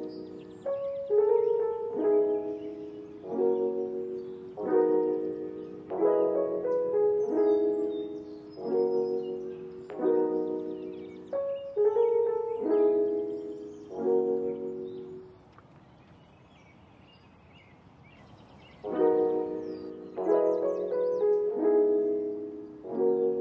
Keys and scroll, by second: 5.1 ctrl+s, 17.8 space, 22.3 space.